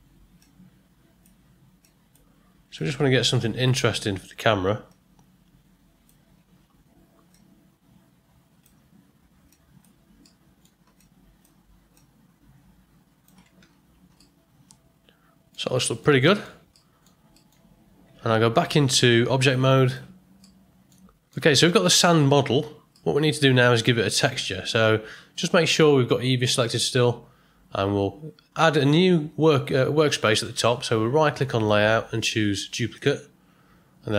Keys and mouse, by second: 0.3 click, 1.8 click, 2.7 click, 4.8-6.0 drag, 7.3-8.6 drag, 9.5 click, 10.2 middle click, 10.9 click, 11.9-13.2 drag, 14.1-15.5 middle drag, 15.8 ctrl+middle click, 16.2 shift+middle click, 16.7 middle click, 17.3 ctrl+middle click, 18.5 Tab, 20.4-20.9 middle drag, 21.0 ctrl+middle click, 23.0-23.7 middle drag, 31.5-33.0 right drag, 34.1 click.